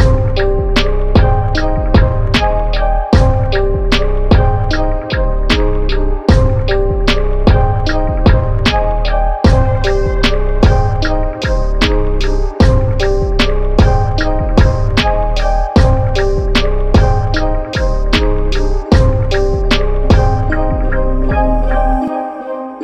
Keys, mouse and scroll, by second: 8.2 click, 11.9 click, 17.5 click, 20.5 click.